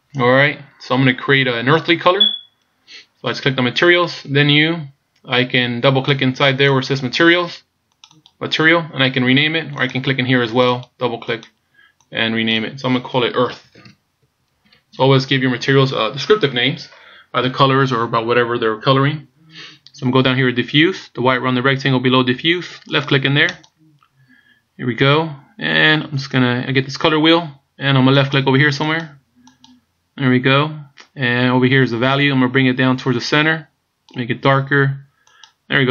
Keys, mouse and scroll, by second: 6.7 click, 8.1 click, 8.3 click, 10.6 click, 23.6 click.